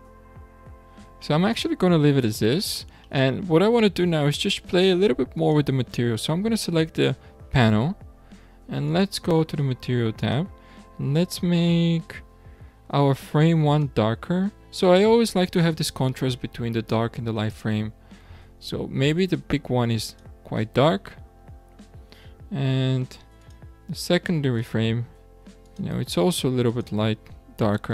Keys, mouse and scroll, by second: 0.6-1.3 scroll down 8, 1.3-2.2 shift+middle drag, 2.2-2.7 scroll up 5, 3.1-5.4 shift+middle drag, 5.4 click, 8.9 click, 10.2 click, 13.7 click, 23.4 click, 25.1 click.